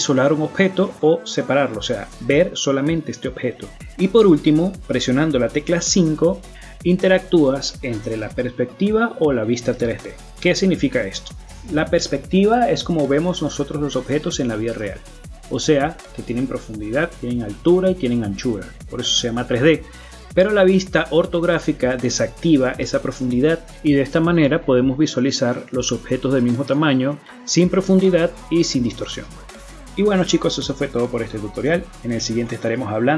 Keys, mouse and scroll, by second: 0.2 middle click, 0.8-1.3 scroll down 1, 1.3 middle click, 1.8 right click, 2.3 KP_Divide, 3.0 KP_Divide, 3.4 scroll down 2, 3.7 middle click, 4.3 right click, 4.5 shift+middle click, 5.3 KP_5, 5.9 scroll down 1, 6.2 middle click, 7.3 KP_5, 7.8 KP_5, 8.1 middle click, 8.6 KP_5, 9.2 scroll up 1, 9.5 scroll down 3, 9.9 middle click, 11.0-11.9 scroll up 8, 11.9-12.7 scroll down 5, 12.7 middle click, 15.3-15.7 scroll down 1, 15.7 middle click, 16.2 right click, 16.5 middle click, 17.1 g, 18.4 middle click, 19.0-19.4 scroll up 1, 19.4 middle click, 20.3 KP_5, 21.7 middle click, 24.3-24.7 scroll down 3, 24.7 middle click, 25.4 KP_5, 26.1 middle click, 28.8 space.